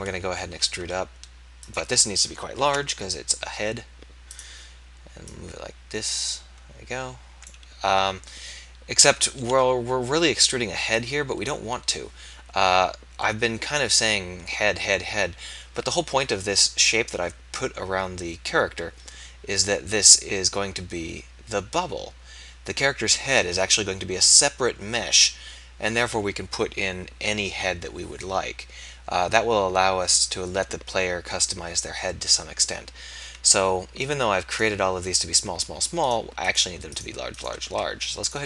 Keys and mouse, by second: 0.5 e, 2.7 ctrl+a, 9.5 e, 15.8 KP_3, 34.6-37.6 drag, 37.6 x.